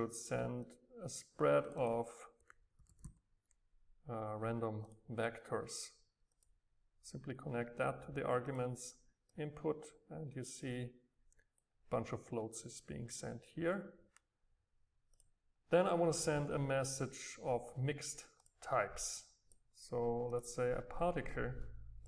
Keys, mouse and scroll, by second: 0.8 click, 1.5-2.8 drag, 2.8-3.8 scroll, 4.9-8.4 drag, 8.6 click, 9.4-10.6 drag, 10.6-13.4 right drag, 15.2 click, 16.1-17.1 drag, 18.5 click, 19.3-21.2 drag, 21.2 middle click, 22.0 click.